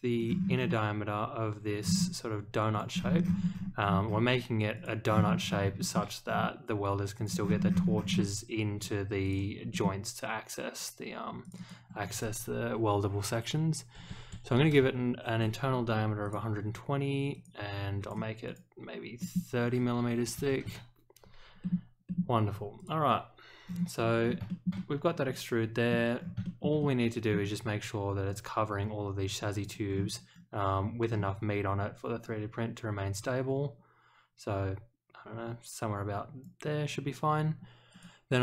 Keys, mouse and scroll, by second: 0.2-0.7 scroll down 1, 1.8-2.2 scroll down 2, 2.7 click, 2.9-4.1 scroll up 7, 4.7 click, 5.0 scroll down 4, 5.7 shift+middle click, 6.2 scroll down 1, 7.1 click, 7.4-8.1 scroll up 2, 9.2 click, 9.7 middle click, 11.4 click, 11.5 click, 16.2 click, 17.3 click, 18.0 click, 18.4 click, 19.2 middle click, 21.6 middle click, 22.0 middle click, 22.7 click, 23.6-24.3 scroll down 3, 24.4 shift+middle click, 24.7-25.9 middle drag, 26.2 scroll down 1, 26.4 shift+middle click, 26.8 middle click, 28.2-29.6 drag, 29.8 scroll down 1, 31.1-31.4 scroll up 1, 32.2-36.4 drag, 37.9 click.